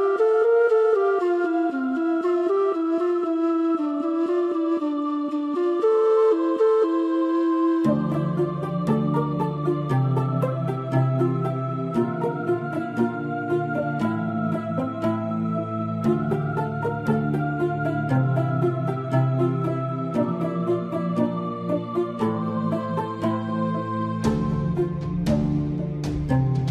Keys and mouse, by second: 0.4-1.6 middle drag, 3.2 Tab, 10.1 shift+middle click, 20.9 click, 22.2 click.